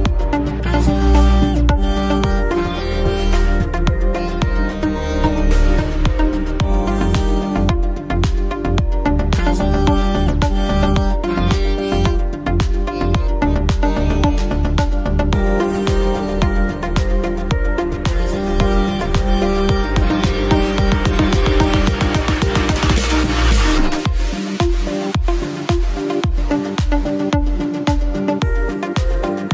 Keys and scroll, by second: 8.6 space, 11.6 ctrl+t, 18.4 ctrl+z, 18.9 ctrl+z, 20.9 ctrl+t, 26.8 shift+space, 29.4 shift+space.